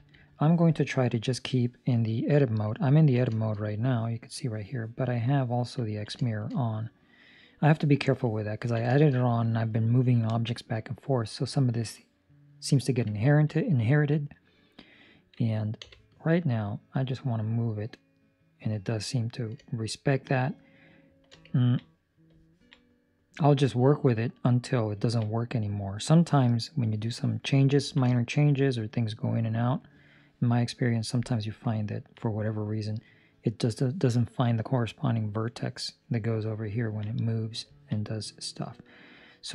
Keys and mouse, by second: 0.2 Escape, 2.9 ctrl+middle click, 3.3 shift+middle click, 5.8 ctrl+middle click, 6.1 shift+middle click, 8.4 ctrl+middle click, 9.0 shift+middle click, 13.2 ctrl+middle click, 15.7 b, 17.4 click, 21.5 ctrl+middle click, 21.8 middle click, 22.4 ctrl+middle click, 25.3 ctrl+middle click, 25.9 middle click, 26.1 ctrl+middle click, 27.7 ctrl+middle click, 28.0 shift+middle click, 28.3 middle click, 30.0 middle click, 31.1 middle click, 31.8 ctrl+middle click, 32.3 middle click, 33.2 middle click, 36.7 ctrl+middle click, 37.0 middle click, 37.6 ctrl+middle click, 37.9 middle click.